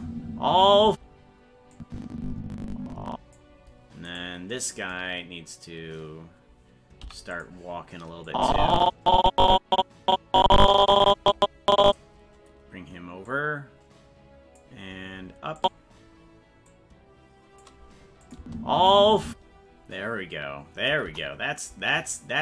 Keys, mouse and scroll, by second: 1.8-3.4 drag, 4.2 right click, 7.0 i, 8.3-12.0 drag, 13.3-14.6 drag, 15.6 click, 16.7 click, 18.3 click, 18.4 space, 21.1 KP_0.